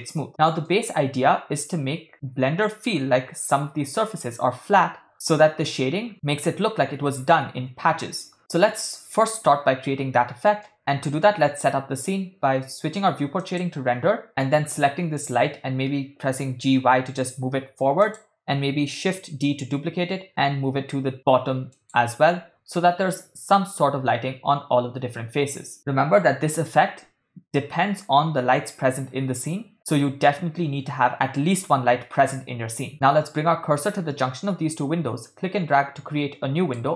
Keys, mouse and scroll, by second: 0.2 middle drag, 0.7-1.2 ctrl+middle drag, 8.4 ctrl+middle click, 9.5-10.5 shift+middle drag, 10.7-11.7 middle drag, 13.7 click, 14.3 ctrl+middle click, 15.2 click, 16.7 g, 19.2 shift+d, 35.2-36.9 drag.